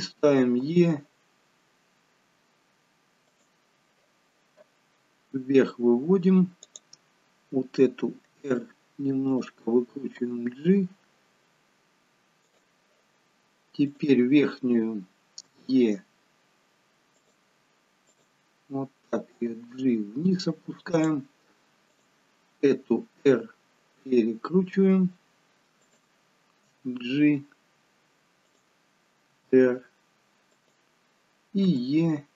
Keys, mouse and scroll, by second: 0.4 e, 4.9-5.4 scroll down 1, 6.7 click, 8.3 r, 10.1 g, 13.9 click, 15.5 e, 18.1 click, 19.3 g, 22.0 click, 23.1 r, 26.7 g, 29.3 r, 31.7 e.